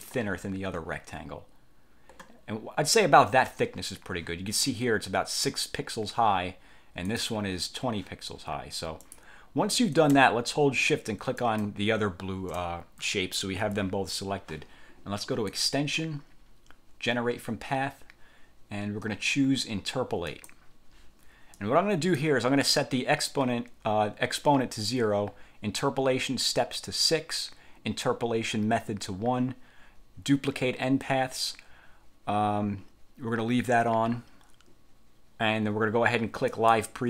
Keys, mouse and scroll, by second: 7.2 click, 9.1 click, 11.5 shift+click, 15.6 click, 20.4 click, 21.7 click, 36.6 click.